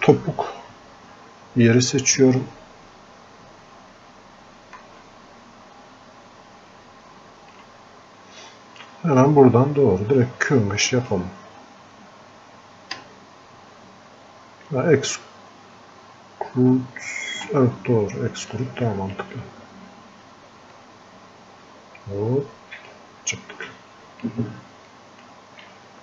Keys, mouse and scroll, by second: 9.8-10.3 scroll down 1, 10.9 click, 13.1 space, 18.6-20.8 drag, 20.8-22.9 drag, 23.4-24.9 drag, 24.9 click.